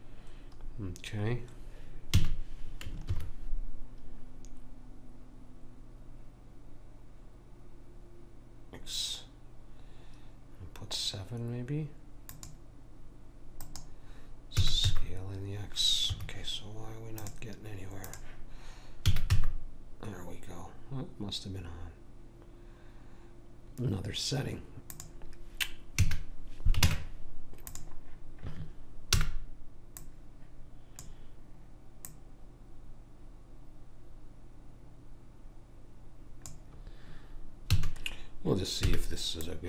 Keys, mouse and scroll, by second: 2.1 a, 3.1 ctrl+r, 14.6 s, 17.2 click, 19.1 s, 26.0 a, 26.8 ctrl+Tab, 29.2 b, 32.0 click, 37.8 a, 38.9 b.